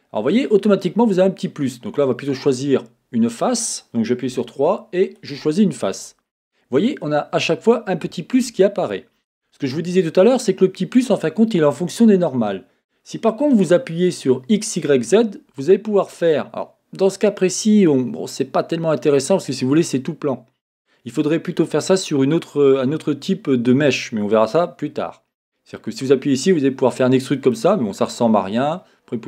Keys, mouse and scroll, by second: 0.3-2.5 middle drag, 2.5 click, 4.3 3, 5.0 click, 8.9-14.8 drag, 15.6-25.7 middle drag, 18.3 typing, 25.7-29.2 drag.